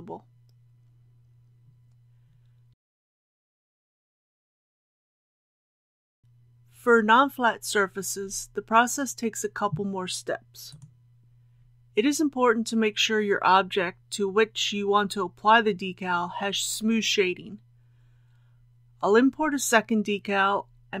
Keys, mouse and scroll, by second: 2.1 click, 3.7 KP_Decimal, 4.0 KP_0, 4.2 KP_1, 7.5 middle click, 9.0 click, 10.0-13.7 middle drag, 13.9 KP_1, 18.3 shift+a, 19.4 click.